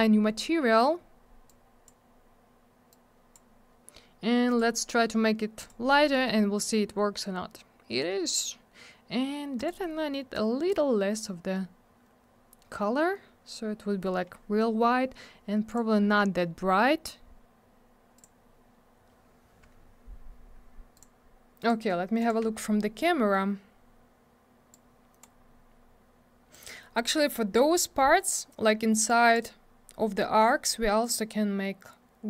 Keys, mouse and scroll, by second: 1.5 click, 4.5 click, 4.6 click, 5.6 click, 5.7 click, 9.6 click, 15.7 click, 18.2 click, 20.9 click, 21.0 click, 22.2 click, 22.3 click, 24.7 click, 26.5 click, 26.7 click, 29.1 click.